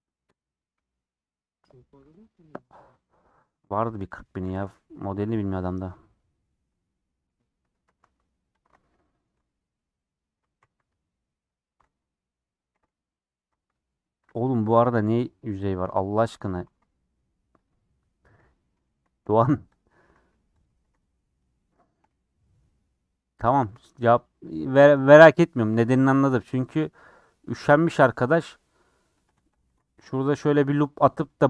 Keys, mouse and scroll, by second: 4.9 /, 5.3-6.5 middle drag, 6.5 scroll up 3, 6.6 Tab, 6.8 middle click, 7.8 b, 8.6 alt+click, 8.9 scroll down 1, 9.0-10.6 shift+middle drag, 10.6 g, 11.8 alt+z, 12.7 alt+z, 13.2 scroll up 1, 14.5 KP_Decimal, 15.6 shift+middle click, 15.8 scroll up 1, 16.0 middle click, 16.6 alt+z, 16.9 middle click, 17.6 click, 17.8 scroll up 2, 18.2 alt+z, 18.4 middle click, 18.9 alt+2, 19.0 scroll up 1, 19.2 middle click, 19.7 click, 20.8 alt+z, 20.9-21.6 scroll down 5, 21.1 middle click, 21.7-23.4 shift+middle drag, 23.3 scroll up 1, 23.4 scroll down 1, 23.4 scroll up 3, 23.8 shift+middle click, 24.6 2, 24.9-27.2 middle drag, 27.2 click, 27.9 g, 29.6 ctrl+r.